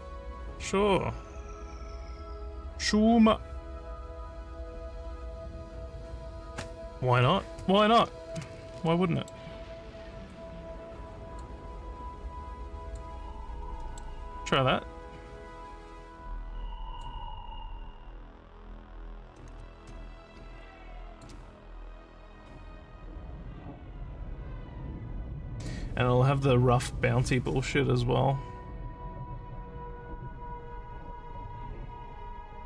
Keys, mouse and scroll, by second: 8.9 alt+middle click, 10.3-11.4 drag, 12.8 click, 13.4 scroll up 1, 13.8 middle click, 16.9 click, 19.7 ctrl+s, 21.1 click.